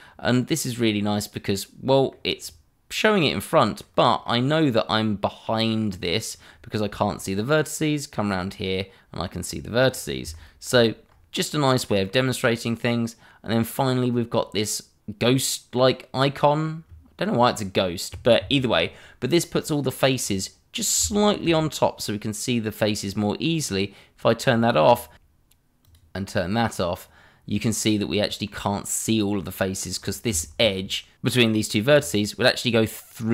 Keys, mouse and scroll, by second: 0.1 middle click, 2.4-3.7 scroll down 1, 3.8 middle click, 5.7 middle click, 8.2 middle click, 9.9 scroll up 1, 10.7 shift+middle click, 11.0 middle click, 11.1-11.5 scroll up 1, 11.5 middle click, 19.5 middle click, 20.1-21.0 scroll up 1, 21.1 shift+middle click, 24.4 click, 24.8-25.1 scroll down 1, 25.1 shift+middle click, 25.8 middle click, 26.5 click, 26.5 middle click, 29.9-30.3 scroll up 1, 30.4 shift+middle click, 30.7 scroll up 1, 31.1 click, 32.0 shift+click, 32.4 click, 32.5-33.1 scroll down 2, 32.6 middle click, 33.1 middle click.